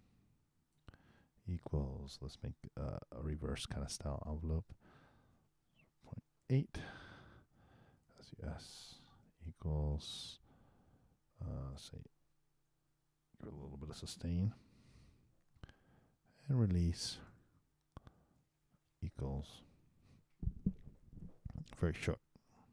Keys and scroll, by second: 18.4 shift+l.